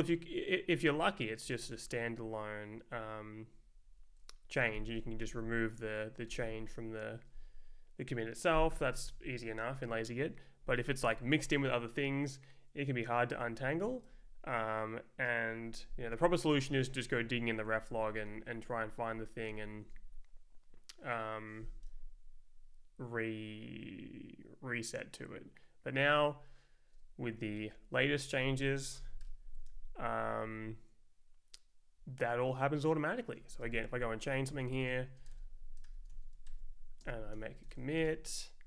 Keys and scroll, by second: 0.1 Down, 0.9 Down, 1.4 Up, 2.9 Down, 3.5 Down, 4.2 Up, 5.2 d, 6.3 Return, 13.4 Escape, 16.5 ], 17.2 Down, 17.6 Up, 18.3 p, 19.0 [, 19.7 Up, 27.6 Left, 28.0 Up, 28.4-29.5 typing, 30.3 Right, 32.0 Left, 33.6 ctrl+s, 34.1 Up, 34.4 Down, 34.5 super+Right, 34.6-38.2 typing.